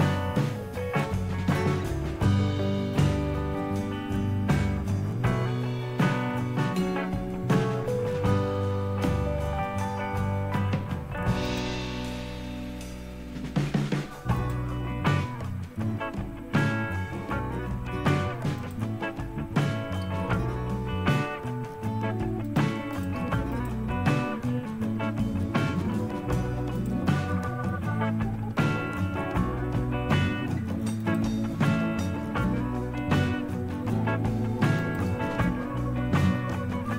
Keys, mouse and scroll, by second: 2.1 scroll down 2, 3.0-4.3 scroll down 4, 9.2-10.1 scroll down 4, 10.5-11.6 scroll down 2, 11.6 click, 12.2-13.5 scroll down 2, 13.5-14.5 scroll down 1, 14.5 click, 14.9-16.8 scroll down 2, 16.8-17.1 scroll down 1, 18.6 click, 19.3-20.0 scroll down 1, 20.0-21.6 scroll down 1, 21.6 scroll down 1, 22.5 click, 23.0 click, 23.5 click, 24.3-25.6 scroll down 2, 25.6 scroll down 1, 26.8 click, 27.4-28.6 scroll down 2, 31.0 click, 31.6-32.8 scroll down 2, 32.8-33.9 scroll down 1, 34.8 click.